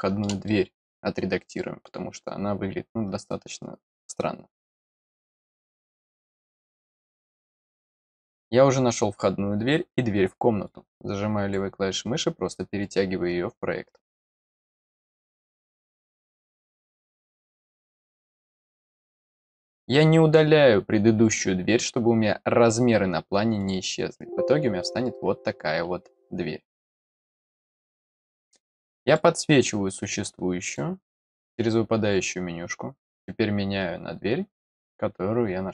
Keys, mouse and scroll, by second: 0.4 middle click, 1.5 middle click, 7.6 click, 10.6 click, 23.5 click, 27.3 click, 29.0 click, 30.6 click, 34.6 click.